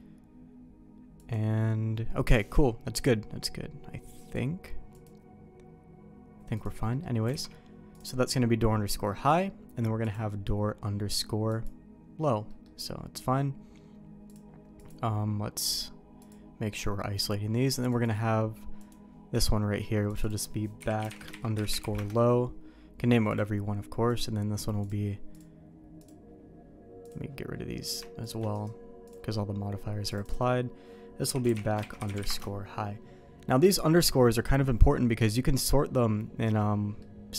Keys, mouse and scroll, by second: 4.3 click, 6.6 click, 7.0 middle click, 7.3 alt+a, 7.9-10.1 drag, 11.5 click, 12.5 middle click, 14.3 click, 16.2 click, 17.9 click, 18.8 click, 19.3-22.7 drag, 23.3 click, 24.1 click, 24.8-28.0 drag, 28.2 shift+click, 28.5 right click, 30.1-33.0 drag, 36.5 middle click.